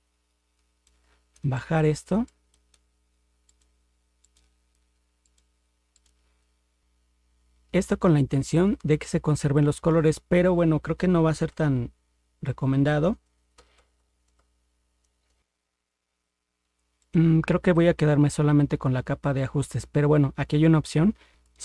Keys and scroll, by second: 11.5 ctrl+0, 13.6 ctrl+=, 15.4 ctrl+0.